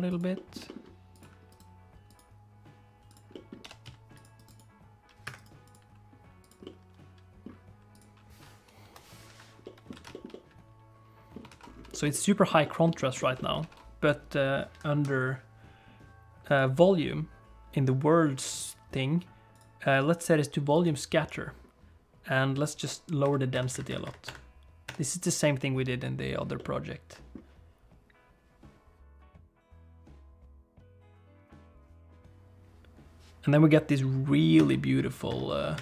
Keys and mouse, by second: 0.3 middle click, 0.6 g, 1.6-3.1 right drag, 3.3 middle click, 3.6 g, 4.3 right click, 5.3-6.5 right drag, 6.6 middle click, 8.8 BackSpace, 9.6 alt+middle click, 10.0 alt+a, 10.1 shift+middle click, 10.3-11.3 middle drag, 11.5 ctrl+s, 11.9 shift+middle click, 12.1 middle click, 12.6 shift+middle click, 13.2 shift+middle click, 13.3 middle click, 13.6 ctrl+s, 16.5 click, 19.6-20.9 drag, 23.2-26.3 drag, 26.5 middle click, 34.6-35.8 drag.